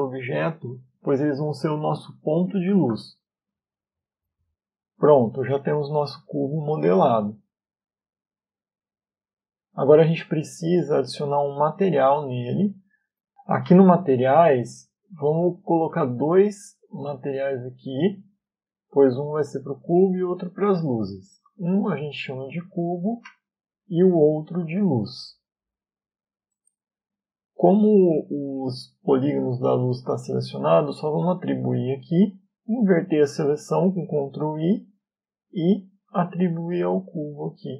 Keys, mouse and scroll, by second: 4.5 middle click, 8.9 Tab, 11.5 Tab, 13.8 click, 16.3 click, 17.7 click, 18.3 click, 18.7 click, 19.2 click, 19.8 click, 20.3 click, 21.0 click, 21.2 click, 24.6 click, 24.8 click, 27.4 middle click, 31.8 click, 34.6 ctrl+i, 36.9 click.